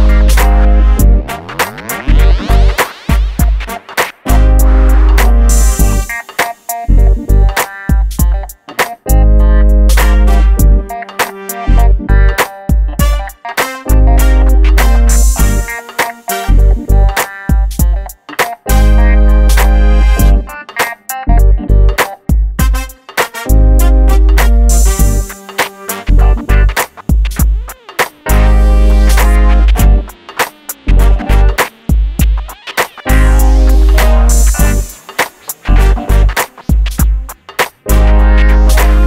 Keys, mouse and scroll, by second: 0.0 scroll up 1, 0.8 typing, 1.1 click, 2.2 Right, 3.6-4.9 typing, 6.1-6.4 scroll down 1, 6.7 shift+middle click, 8.2 click, 9.8-10.5 scroll up 1, 10.5 typing, 11.1 click, 12.2-12.5 scroll up 1, 12.5 shift+middle click, 13.1-13.5 scroll up 1, 14.1 click, 14.7 middle click, 14.9 click, 15.4-16.2 scroll up 1, 16.2 scroll up 1, 16.4 click, 17.3 ctrl+z, 17.8 click, 21.3 ctrl+x, 21.7 click, 22.4 shift+v, 23.8 |, 24.4 click, 25.9 e, 26.5 scroll down 1, 27.9 click, 28.2-28.7 scroll down 1, 28.7 Escape, 29.3 click, 30.0-30.4 scroll down 1, 30.7 click, 33.1 shift+click, 34.4 f, 34.7 click, 35.9 middle click, 36.3 middle click, 36.8 click, 37.7 shift+click, 38.2 shift+f, 38.8 click, 38.9 scroll down 1.